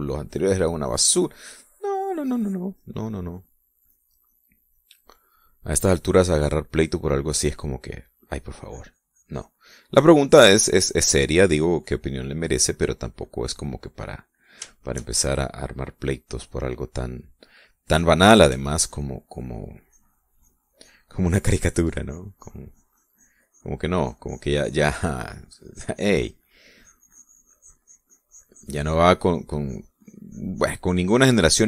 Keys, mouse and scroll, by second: 0.3-1.7 drag, 1.9 click, 2.6 middle click, 3.4-6.2 drag, 6.3 middle click, 6.8-7.5 middle drag, 8.2-12.1 drag, 12.2-14.6 drag, 14.7 click, 15.7-17.1 shift+middle drag, 17.3 middle click, 19.5 f, 19.9 click, 20.3-24.8 drag, 25.1-27.5 drag, 27.8-30.1 drag, 30.3-31.6 drag.